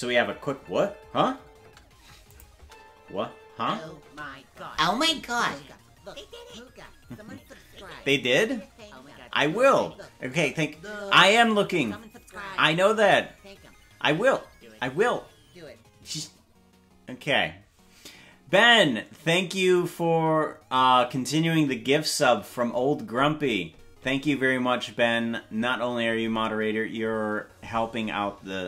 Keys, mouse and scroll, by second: 0.0 space, 2.1 space, 2.3 click, 2.5 space, 4.5 space.